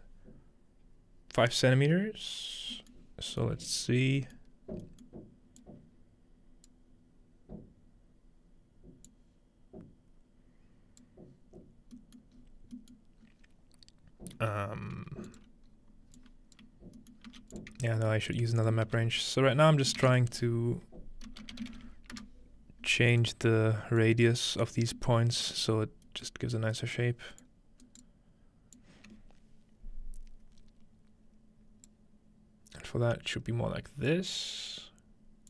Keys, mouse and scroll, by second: 0.9-2.9 scroll up 2, 2.9-4.9 scroll down 2, 5.1-5.6 scroll down 2, 5.6-7.7 drag, 6.1-6.6 scroll down 1, 10.9 click, 12.9-14.9 scroll up 1, 15.3 click, 16.9-17.4 scroll down 1, 17.2-22.1 middle drag, 17.3 g, 17.5 click, 18.0-19.1 scroll up 1, 19.1 ctrl+x, 19.1-20.9 ctrl+scroll up 1, 22.1 click, 24.9-26.9 drag, 26.0-26.9 scroll up 1, 26.9-28.9 middle drag, 26.9-28.9 scroll up 1, 28.9-35.4 drag, 28.9-31.0 right drag.